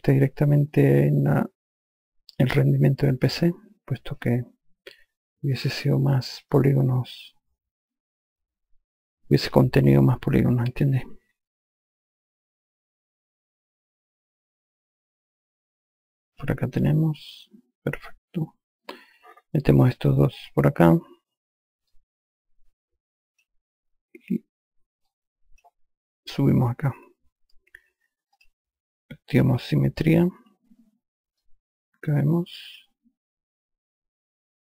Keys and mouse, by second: 1.0 alt+click, 6.8 alt+click, 11.9 alt+click, 15.4 alt+click, 16.6 click, 20.7 click, 22.2 click, 25.4 click, 28.7 click, 31.7 alt+click.